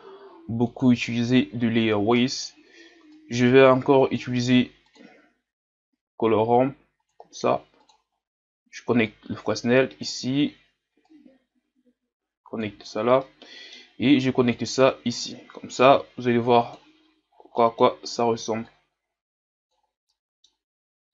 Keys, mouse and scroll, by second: 0.6-1.4 scroll down 1, 1.4-2.1 scroll down 1, 2.1-3.2 scroll down 1, 3.2-4.9 scroll down 1, 4.9-5.6 scroll down 1, 5.6-6.2 scroll down 1, 9.1-11.5 drag, 12.6 click, 17.0 click, 17.3 scroll down 5, 17.5-18.6 middle drag, 18.6 click.